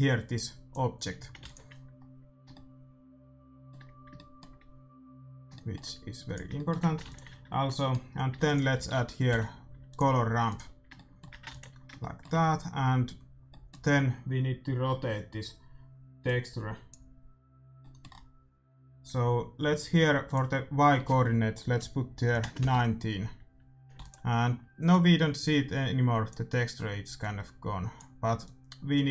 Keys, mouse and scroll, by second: 1.4 ctrl+s, 2.5 shift+w, 5.5 middle click, 6.1-7.9 drag, 7.0 ctrl+s, 7.9-9.6 middle drag, 8.3 shift+a, 10.5-12.2 drag, 10.9-18.0 middle drag, 11.4 ctrl+s, 20.2-22.1 drag, 23.9 ctrl+s, 24.8-27.1 drag, 27.3-29.1 drag.